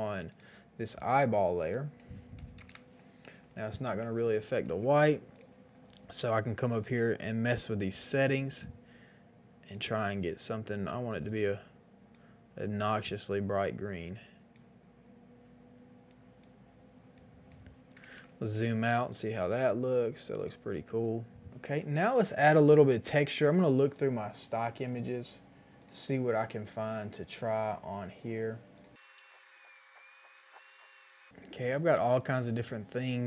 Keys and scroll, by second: 2.4 KP_2, 2.5 KP_5, 2.5 KP_0, 2.6 Return, 3.3 space, 18.0 KP_1, 18.0 KP_0, 18.1 KP_0, 18.1 Return, 18.7 space, 21.5 ctrl+s.